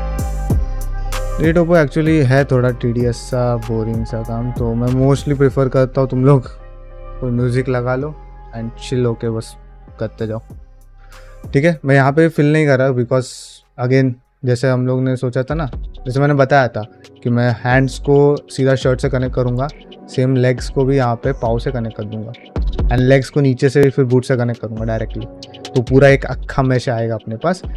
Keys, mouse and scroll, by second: 0.0 middle click, 0.4 click, 0.6 g, 1.0 click, 1.4 g, 2.2 middle click, 2.7 middle click, 3.2 click, 3.5 g, 4.2 click, 4.4 g, 4.9 ctrl+middle click, 5.2 ctrl+middle click, 5.5 middle click, 6.0 ctrl+middle click, 6.4-8.0 middle drag, 9.7 middle click, 10.9 ctrl+middle click, 11.1 middle click, 11.7 middle click, 21.6 ctrl+middle click, 21.9 middle click, 22.3 shift+middle click, 24.2 ctrl+shift+middle click, 24.4 middle click, 24.8 shift+middle click.